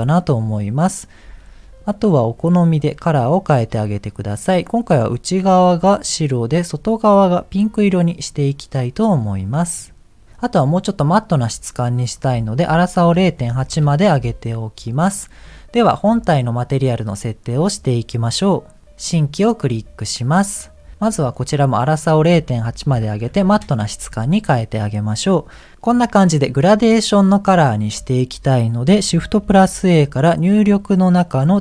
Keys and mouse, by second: 1.7 click, 2.8 click, 5.3 click, 6.0 click, 9.7 click, 12.1-13.7 drag, 16.3 middle click, 20.1 middle click, 22.1-23.6 drag.